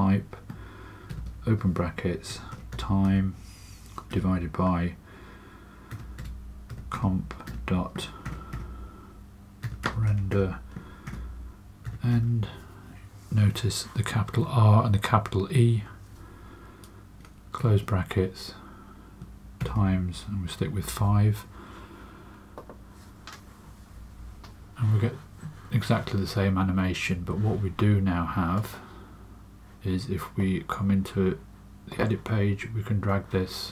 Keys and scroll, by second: 1.0-3.5 typing, 5.6-12.0 typing, 17.5 typing, 19.1-19.5 typing, 20.7 typing, 23.9 space, 27.1 space.